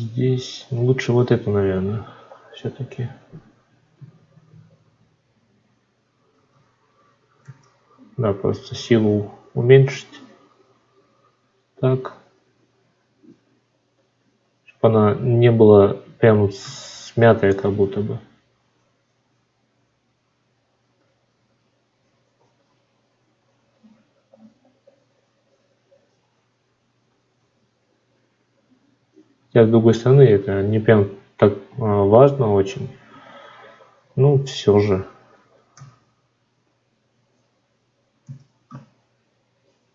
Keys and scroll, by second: 3.8 ctrl+z, 6.2 ctrl+z, 38.1 ctrl+z.